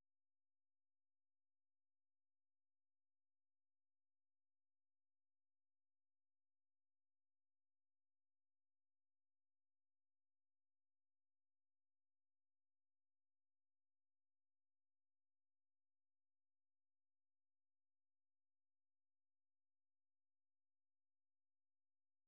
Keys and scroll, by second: 3.4 alt+Tab, 5.3 ctrl+w, 10.2 ctrl+c, 15.3 ctrl+c, 21.1 ctrl+c, 21.7 super+1.